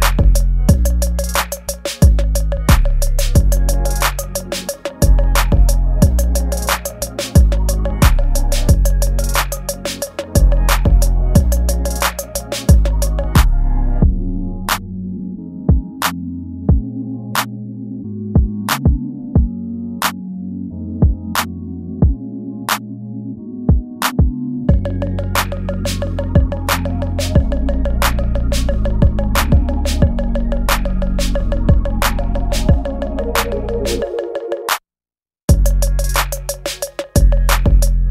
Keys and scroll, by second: 0.0 ctrl+z, 0.3 space, 0.6 ctrl+z, 1.8 space, 3.7 ctrl+z, 4.0 space, 5.1-7.6 typing, 6.5 ctrl+z, 8.1 ctrl+z, 9.0 space, 10.0 ctrl+s, 12.3 space, 12.8 space, 13.7 ctrl+z, 14.2 ctrl+z, 14.5 space, 15.0 ctrl+z, 15.3 space, 16.0 space, 16.2 space, 16.6 ctrl+z, 17.2 ctrl+z, 17.5 ctrl+z, 18.8 space, 19.8 space, 20.0 space, 20.4 space, 22.2 ctrl+z, 23.4 ctrl+z, 23.9 space, 24.9 ctrl+z, 26.7 space, 27.5 ctrl+z, 28.4 space, 30.0 space, 34.9 space, 36.2 space, 36.3 ctrl+s, 37.7 ctrl+z.